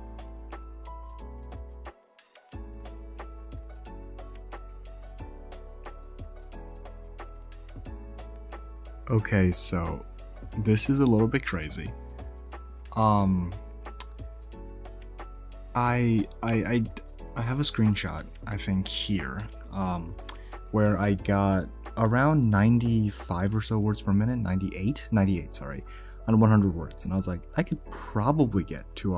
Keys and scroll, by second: 0.0-7.1 typing.